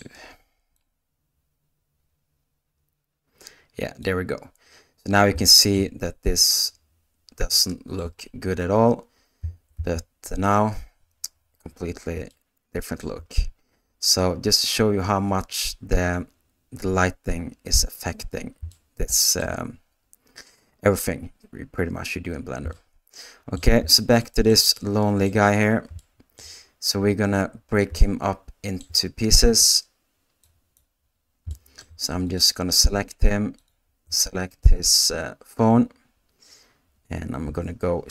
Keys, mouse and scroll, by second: 1.0-5.0 drag, 5.4-17.2 shift+middle drag, 18.7 shift+middle click, 22.8-25.5 shift+middle drag, 26.0 shift+middle click, 28.0-30.4 shift+middle drag, 30.4 click, 31.5 shift+middle click.